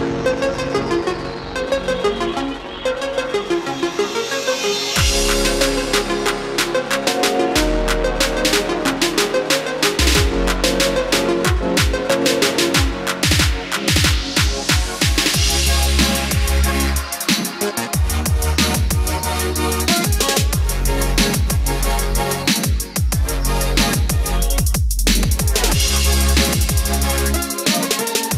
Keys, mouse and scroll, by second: 20.0 middle click, 21.1-21.6 scroll up 1, 22.3 click, 22.6 scroll down 1, 23.7 ctrl+click, 25.6-26.7 drag.